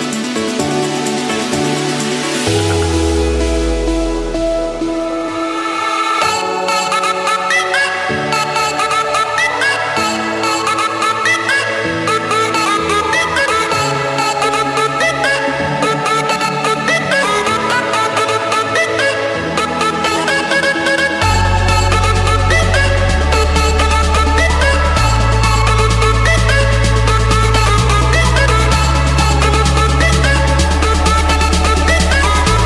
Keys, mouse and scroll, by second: 0.5 scroll, 0.5-0.8 scroll down 7, 0.8 scroll, 1.8 click, 2.1-2.8 scroll, 3.3 click, 3.5 middle click, 3.8 Escape, 8.2 Return, 9.6-10.7 drag, 11.3 5, 12.1 Return, 13.3 Return, 16.0 typing, 16.5 Return, 22.0-23.1 drag, 23.5-24.0 typing, 24.4 Return, 25.9-27.8 typing, 28.3 Return, 29.1 click, 29.8 middle click, 31.8-32.6 typing.